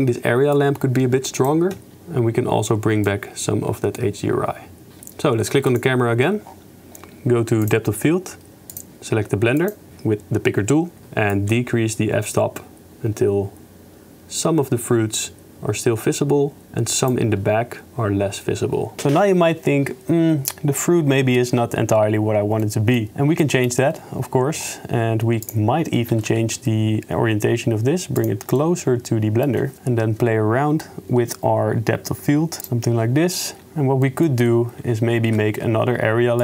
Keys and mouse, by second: 0.5 click, 3.2-4.9 shift+drag, 4.9 KP_0, 7.6 click, 8.7 click, 11.5-13.1 shift+drag, 13.1-16.0 shift+middle drag, 16.0-17.1 shift+drag, 22.7 middle click, 23.4 shift+middle click, 28.2 g, 28.7 middle click, 29.5 click, 32.6 shift+click, 34.0 click, 34.0 right click, 35.5 shift+a.